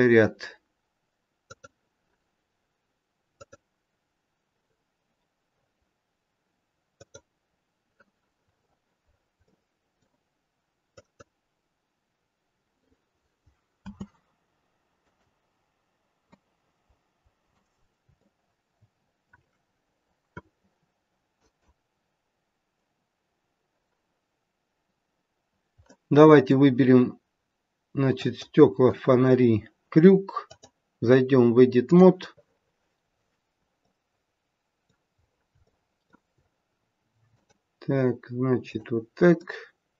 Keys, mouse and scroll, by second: 3.3 click, 5.5-6.3 scroll down 1, 6.3-6.9 scroll down 2, 6.9 click, 8.5-9.0 scroll up 4, 9.0-9.8 scroll down 3, 9.4 middle click, 10.9 click, 13.9 space, 14.9 click, 16.3 middle click, 19.1 shift+middle click, 19.8-20.3 scroll up 1, 20.3-21.2 scroll down 1, 21.2 scroll down 1, 21.3 click, 25.2-25.8 scroll down 2, 25.8 middle click, 28.1 click, 32.5-33.1 scroll up 3, 33.1 scroll down 1, 33.8 middle click, 35.2-35.6 scroll up 1, 35.6 shift+middle click, 37.4 click, 38.7 click, 39.3 middle click.